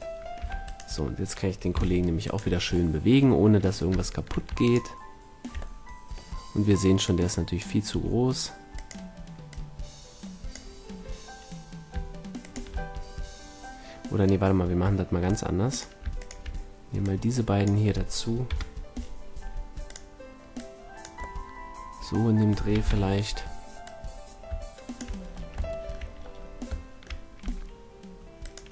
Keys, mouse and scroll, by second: 0.1 drag, 0.3 a, 1.7 g, 4.7-5.7 drag, 5.9-6.4 drag, 7.5-8.6 drag, 7.9 s, 9.5-11.2 drag, 12.3-14.1 drag, 15.7-19.3 drag, 18.4 KP_7, 19.3 s, 19.9-21.3 drag, 22.1 middle click, 22.7 KP_4, 22.7 KP_1, 25.1-25.9 middle drag, 27.3 s, 28.5-28.7 drag.